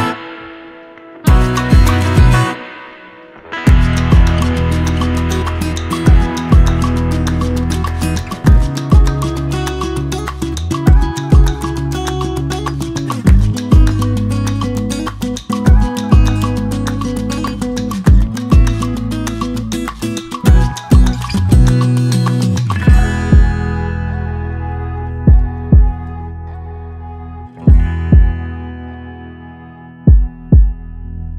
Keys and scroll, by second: 9.4-10.3 typing, 30.3-30.9 Down.